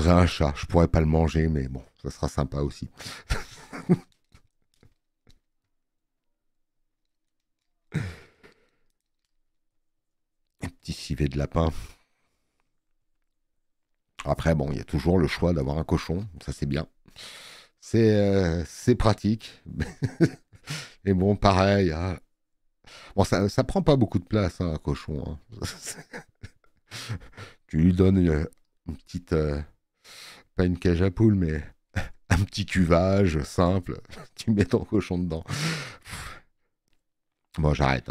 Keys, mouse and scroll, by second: 28.1 space, 28.2 click.